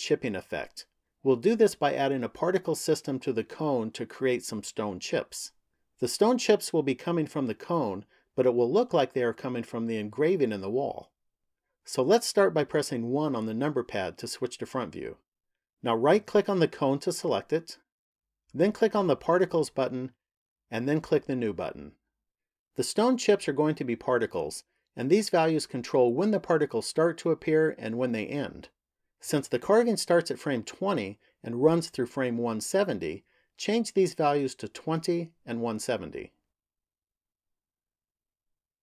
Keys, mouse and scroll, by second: 12.6 KP_1, 15.7 right click, 18.6 click, 20.7 click, 34.0 click, 37.0 click.